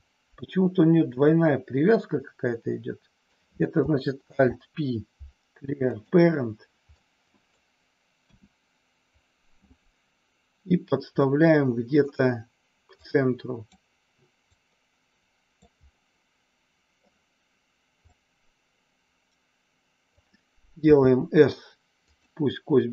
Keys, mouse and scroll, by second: 1.1 click, 2.0-3.3 middle drag, 4.2 alt+p, 6.8 middle click, 8.2 KP_1, 11.1 middle click, 13.0 click, 14.5-15.6 drag, 15.8 scroll up 1, 16.1 middle click, 18.0-20.1 drag, 20.8 s, 22.1 click.